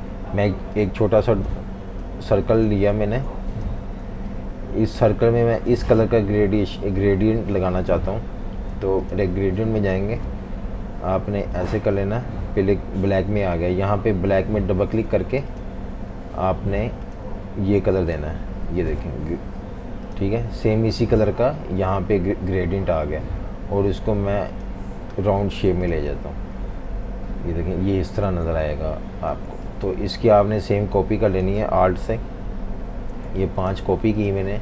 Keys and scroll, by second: 2.1-4.3 typing, 25.7 v, 28.3 z, 29.3 v, 31.9 super+d, 32.2 super+d, 32.5 super+d.